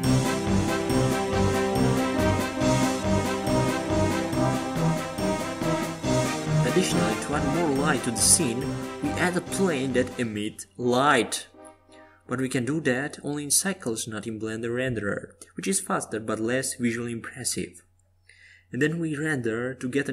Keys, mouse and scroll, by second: 0.5-2.7 drag, 12.3-14.5 drag, 18.7-20.1 drag.